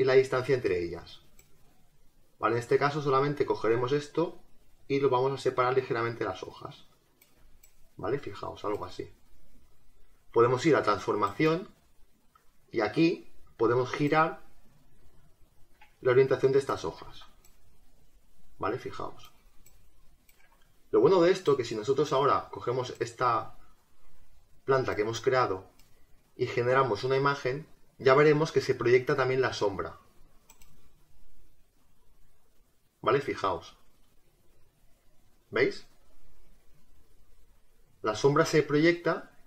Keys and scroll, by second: 17.0 ctrl+z.